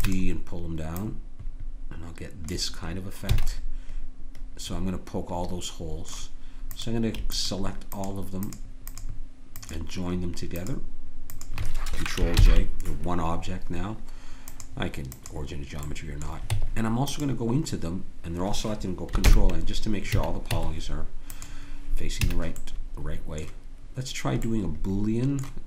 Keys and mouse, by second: 1.0-2.9 drag, 3.4 a, 3.5-5.4 middle drag, 6.7-12.4 right drag, 12.4 ctrl+j, 16.5 Tab, 19.3 ctrl+n, 20.2 a, 20.5 Tab, 22.2 a, 22.6 click.